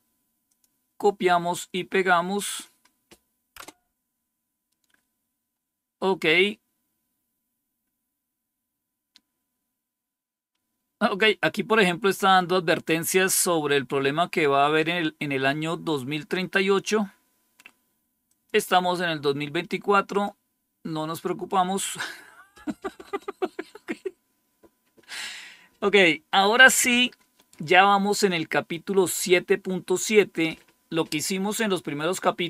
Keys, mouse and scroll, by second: 0.4 click, 0.7 click, 1.4 right click, 2.3 click, 3.5 Return, 6.6-14.7 scroll down 2, 14.7-16.4 drag, 18.1 click, 20.0 click, 20.8 click, 23.1-31.8 scroll up 2.